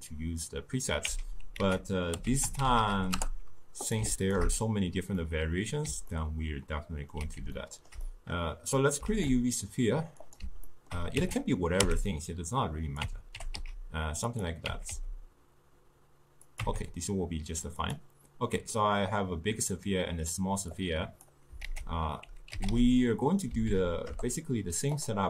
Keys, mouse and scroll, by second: 1.1 x, 4.3-5.3 alt+shift+drag, 5.3 scroll down 2, 5.3-10.4 middle drag, 10.4 shift+a, 10.8-11.3 ctrl+middle drag, 11.3 Tab, 11.9 s, 13.1 Tab, 13.5 g, 14.8 Tab, 15.0 s, 16.7 Tab, 18.0 click, 25.1 Down.